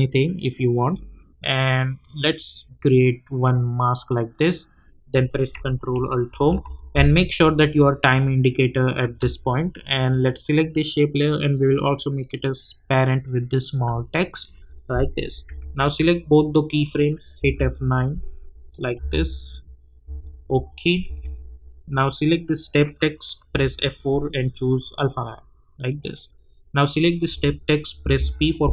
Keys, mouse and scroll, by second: 0.9-6.3 drag, 6.3 ctrl+alt+Home, 10.4-14.4 drag, 15.4 j, 15.9-17.4 drag, 17.4 F9, 18.7 click, 19.0 space, 21.0 j, 22.2 click, 23.5 F4, 24.3 click, 28.0 p.